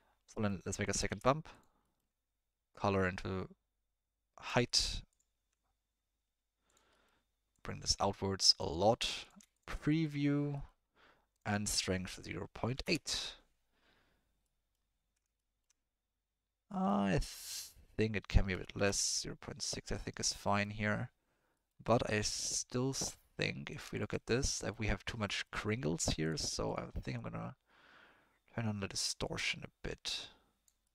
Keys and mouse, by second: 0.4 middle click, 0.8 click, 1.1 shift+d, 1.9 middle click, 2.7-4.4 drag, 5.1 click, 6.7 click, 7.5-8.7 drag, 8.8 middle click, 9.2 click, 9.5 ctrl+shift+click, 9.9 middle click, 10.5 middle click, 11.3-12.8 drag, 14.4 middle click, 14.5 click, 14.7 middle click, 15.3 shift+middle drag, 16.7 middle click, 17.5-18.8 drag, 20.3 middle drag, 21.5 middle click, 21.9 middle click, 22.8 middle click, 23.3 middle click, 23.7 click, 23.9 ctrl+shift+click, 24.4-24.7 middle drag, 25.4 middle click, 26.3 click, 27.1-30.7 drag.